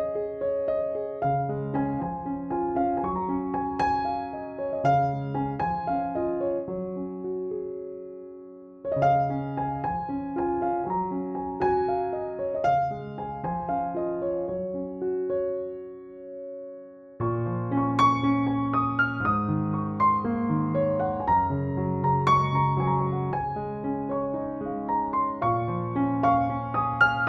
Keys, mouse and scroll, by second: 0.0-2.6 typing, 0.1 click, 0.6 click, 0.8-1.2 click, 1.3 click, 1.6 click, 2.0 click, 2.4 click, 3.1 click, 4.1-7.3 typing, 4.2 click, 4.8 click, 5.1 click, 5.7 click, 6.2 ctrl+=, 7.6 alt+click, 7.7-8.4 click, 9.3 alt+click, 9.6-10.5 click, 11.2 space, 11.5 alt+click, 11.6-11.9 click, 11.9 space, 12.0 click, 12.8 click, 13.5 alt+click, 13.8-14.4 click, 14.7 ctrl+shift+f, 15.0 click, 15.2 ctrl+-, 15.8 click, 16.1 ctrl+=, 16.4 space, 16.5 click, 16.7 space, 17.0 alt+click, 17.3 click, 17.5 alt+click, 17.6 click, 17.8 alt+click, 17.9-18.7 click, 18.6 alt+click, 18.7-19.1 click, 19.6-19.9 click, 19.9 space, 20.1 alt+drag, 20.9 alt+click, 21.0 click, 21.2 alt+click, 21.4 click, 22.1 ctrl+-, 22.5 space, 22.6 click, 22.7 space, 22.9 click, 23.0 space, 23.3 alt+click, 23.4 click, 23.9 alt+click, 24.1 click, 24.3 alt+click, 24.4 click, 24.7 alt+click, 24.8 click, 25.1 alt+click, 25.2 click, 25.7 alt+click, 26.1 space, 26.2 click, 26.3 space, 26.6 alt+click, 26.7 click.